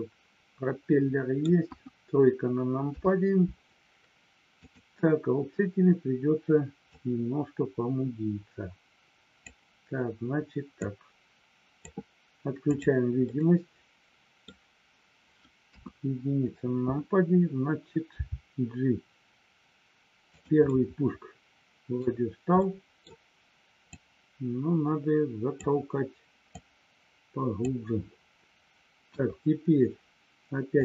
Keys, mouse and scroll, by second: 1.7 KP_1, 2.9 KP_3, 4.5 click, 6.8-9.3 drag, 10.8 click, 12.6 click, 13.3-14.5 middle drag, 15.7 KP_1, 18.2 g, 20.6 scroll up 1, 20.7-22.1 middle drag, 22.6 scroll up 1, 22.7 middle click, 23.8-25.7 drag, 26.6-27.7 drag, 29.1 KP_1, 30.7 click.